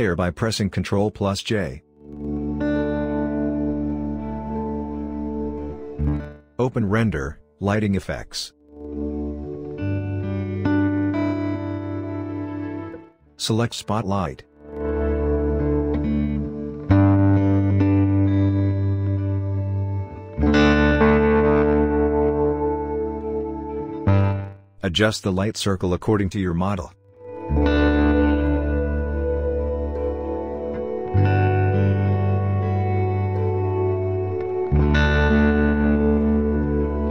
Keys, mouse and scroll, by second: 3.2 click, 6.9 click, 10.8 click, 14.1 click, 21.2-31.9 drag, 32.2-37.1 drag.